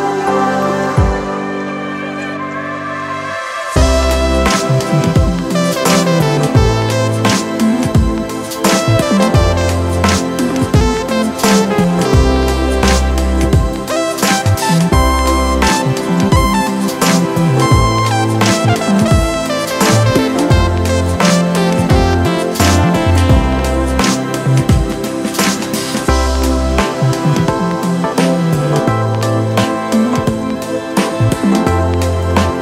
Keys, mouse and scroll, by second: 7.9 alt+shift+click, 26.6 alt+shift+click, 32.2 alt+shift+click.